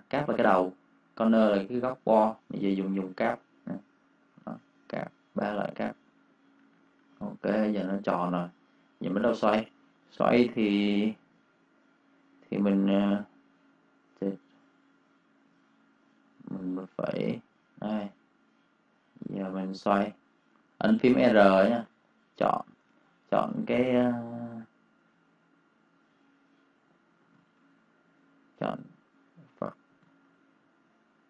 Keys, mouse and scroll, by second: 2.7 click, 5.6 click, 5.8 v, 6.0 click, 6.5 -, 7.5 space, 7.7 click, 9.5 space, 9.7 click, 10.5 r, 13.3 r, 15.6 ctrl+r, 16.2 click, 19.1 r, 21.9 click, 22.8 ctrl+z, 23.1 v, 23.4 click, 27.2 ctrl+shift+;, 28.0 click, 29.8 ctrl+alt+;, 30.8 click.